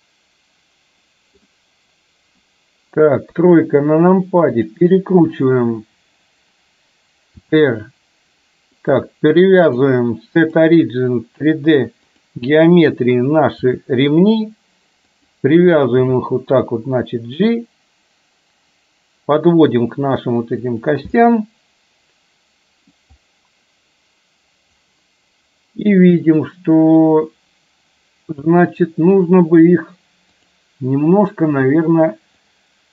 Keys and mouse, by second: 3.3 KP_3, 4.6 click, 7.5 r, 9.9-12.4 drag, 13.8 r, 16.1 g, 21.3-23.1 middle drag, 30.5 click, 32.6-32.9 drag.